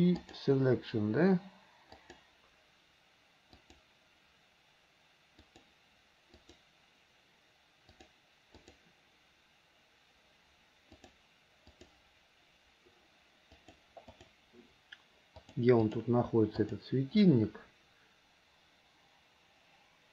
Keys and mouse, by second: 2.2 click, 3.7 click, 5.6 click, 6.6 click, 8.1 click, 8.8 click, 11.1 click, 11.9 click, 13.1 alt+h, 13.8 click, 14.4 click, 15.6 click, 16.8 click.